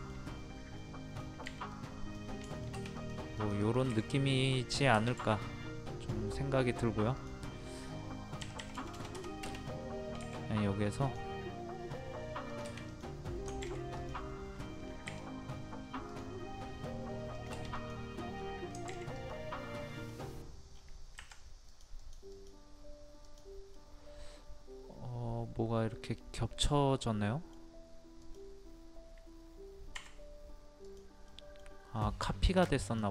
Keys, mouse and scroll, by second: 0.0 shift+middle click, 0.4 scroll up 1, 0.8 middle click, 1.7 click, 2.9 shift+middle click, 3.0 click, 5.2 space, 7.1 click, 8.4 KP_2, 11.0 click, 14.0 click, 15.1 r, 16.1 click, 18.3 scroll down 1, 19.1 click, 19.6 middle click, 20.7-21.2 scroll down 1, 21.2 Escape, 21.7 click, 23.7-27.9 middle drag, 28.2 click, 29.9 Escape, 30.8 click, 31.3 middle click, 31.7 scroll up 1, 32.5 click.